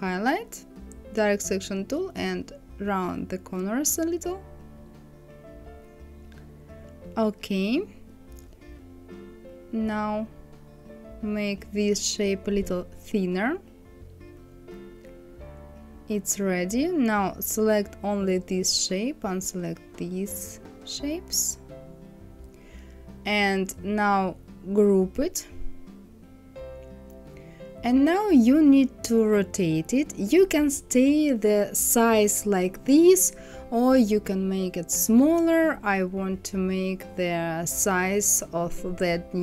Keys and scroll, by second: 11.6 Left, 12.6 Down.